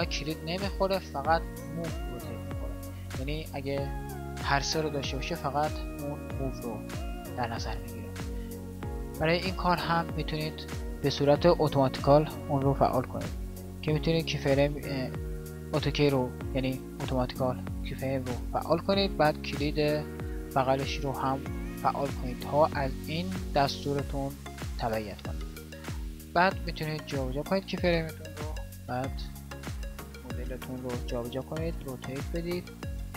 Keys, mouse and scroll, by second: 22.1-28.8 drag, 28.8 g, 31.7 r, 33.0 s.